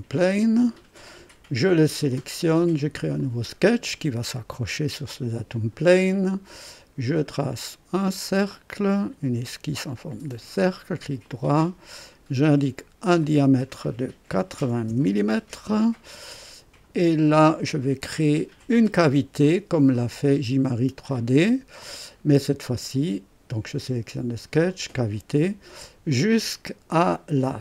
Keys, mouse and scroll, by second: 0.5 click, 2.1 click, 3.1 click, 4.3 scroll up 2, 4.7 right click, 7.0 click, 8.9 click, 10.2 click, 10.7 right click, 12.0 click, 13.2 click, 14.3 KP_8, 14.5 KP_0, 14.9 KP_Enter, 16.7 click, 17.5-18.3 drag, 18.7 right click, 19.4 click, 20.3-20.8 drag, 21.1 right click, 24.6 click, 26.0 click.